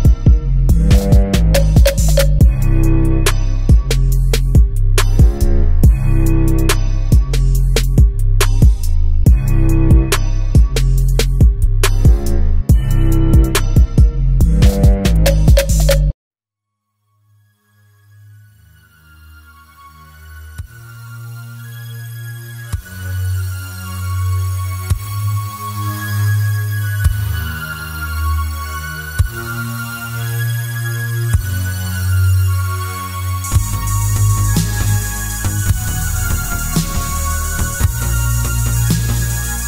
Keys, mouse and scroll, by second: 1.8-2.6 scroll down 1, 4.3-7.0 middle drag, 7.0 click, 8.0 click, 9.2 b, 10.3 Tab, 11.1 click, 12.7 Tab, 13.8 click, 15.8 click, 16.4 click, 17.4 g, 19.1 click, 19.8 g, 20.9 click, 21.8 click, 23.1 click, 24.2-30.7 drag, 30.7-34.7 middle drag, 35.8-38.0 middle drag.